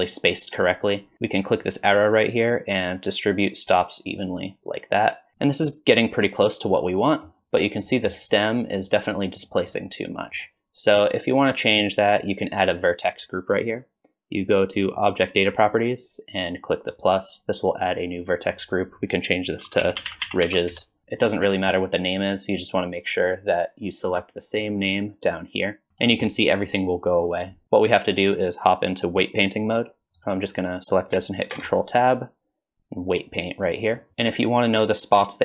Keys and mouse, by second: 1.5-4.2 drag, 5.4-7.3 middle drag, 7.9 middle drag, 9.4-10.4 middle drag, 16.9 click, 18.7-21.0 drag, 25.2 click, 26.1 middle click, 30.5 click, 31.5 ctrl+Tab.